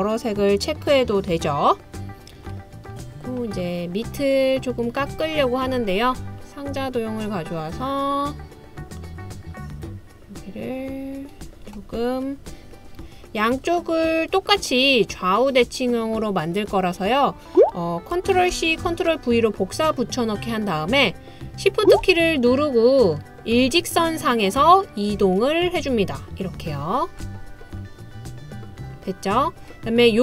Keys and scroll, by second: 18.5 super+c, 18.9 super+v.